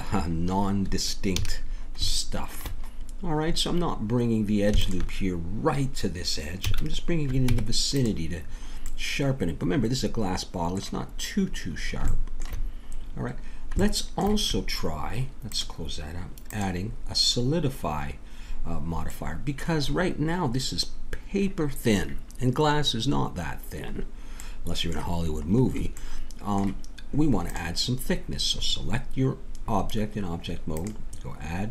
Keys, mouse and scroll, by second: 1.3 a, 1.6 middle click, 6.7 a, 7.5 Tab, 9.5 middle click, 15.5-18.3 drag, 18.3 middle click, 19.9-22.1 middle drag, 23.4-24.7 middle drag, 27.5-29.2 drag, 30.7-31.7 drag.